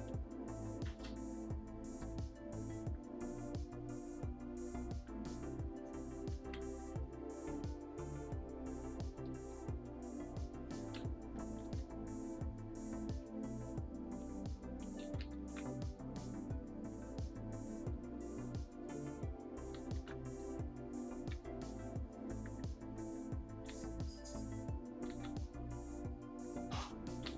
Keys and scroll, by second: 0.0 ], 1.9 ], 6.4 ctrl+z, 9.7 [, 11.6 ctrl+z, 15.0 ctrl+z, 15.2 ctrl+z, 15.4 ctrl+z, 19.7 ctrl+z, 19.9 ctrl+z, 23.6 ctrl+z, 25.1 ctrl+z, 27.2 ctrl+z.